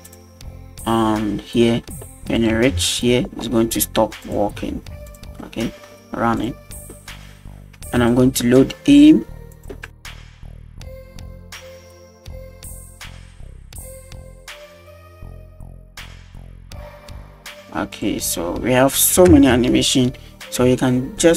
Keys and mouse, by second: 0.1 click, 1.7 middle click, 2.4 click, 2.6 space, 4.3 click, 5.1 drag, 5.4-5.8 middle drag, 6.4 click, 7.8 space, 8.1 click, 9.6-10.2 drag, 10.4-11.2 drag, 11.4 click, 11.7 click, 11.9 click, 12.1 middle drag, 12.3 space, 12.5 click, 12.8 middle click, 13.0 space, 13.7 click, 13.8 click, 14.0 middle click, 14.0 space, 14.2 click, 14.4 middle click, 14.4 space, 14.5 shift+middle click, 14.6 shift+middle click, 15.4 middle click, 15.7 shift+click, 16.1 space, 16.6 middle click, 16.7 shift+middle click, 16.9 click, 17.0 middle click, 17.2 middle click, 17.3 space, 18.0 click, 19.3 space.